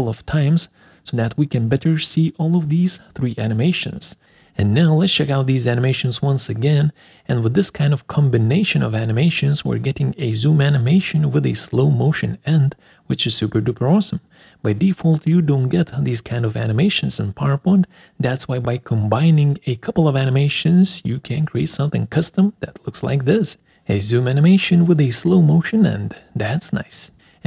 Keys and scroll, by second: 24.3 Escape.